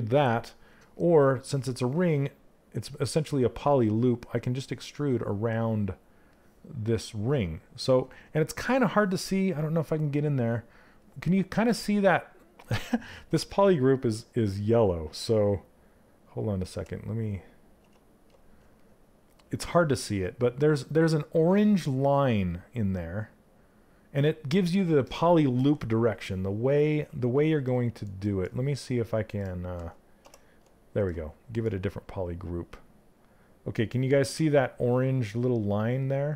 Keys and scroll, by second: 16.2 ctrl+w.